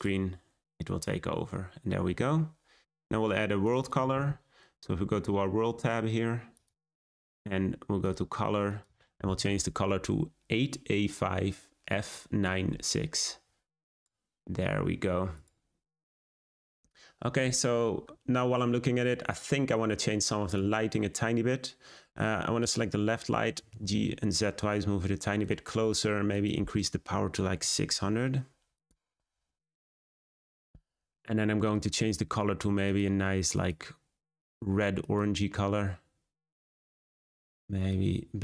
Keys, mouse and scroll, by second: 1.2-4.3 scroll down 2, 5.3 scroll up 1, 6.7 click, 15.9-16.3 scroll down 1, 16.3-18.4 drag, 18.4-20.6 scroll down 1, 20.6 click, 23.3 scroll up 1, 23.6 g, 26.3 click, 30.2 0, 31.7 click.